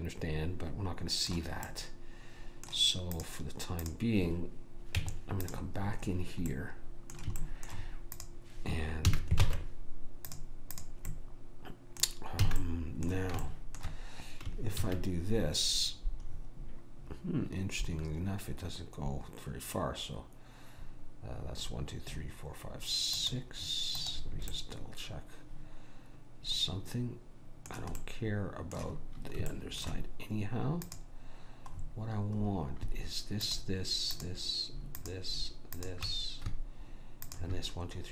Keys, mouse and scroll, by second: 1.7-3.3 middle drag, 3.3-5.7 drag, 5.0 Tab, 6.6 middle click, 8.2 click, 8.2 right click, 9.1 a, 9.5 ctrl+Tab, 10.8 click, 11.2-12.4 middle drag, 12.4 click, 12.6 a, 12.9-14.9 middle drag, 14.9 ctrl+r, 24.6-26.6 middle drag, 28.1-32.4 middle drag, 30.9 click.